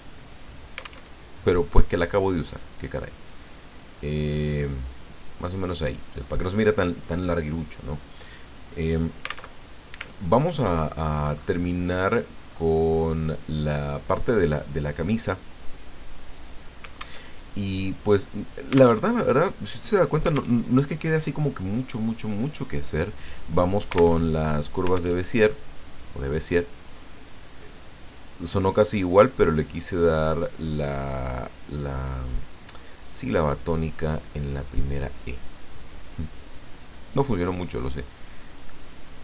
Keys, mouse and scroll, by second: 1.0 alt+Tab, 1.5 click, 2.8-6.4 drag, 9.6 alt+Tab, 10.3-11.7 ctrl+scroll up 6, 12.1-12.7 ctrl+scroll up 2, 13.5 scroll down 2, 17.2 alt+Tab, 19.1 alt+Tab, 20.5 alt+Tab, 22.5 click, 24.2 alt+Tab, 25.2 alt+Tab, 28.2 click, 29.3-30.3 drag, 32.2 click, 33.3-34.4 drag, 36.8 click, 38.8 click.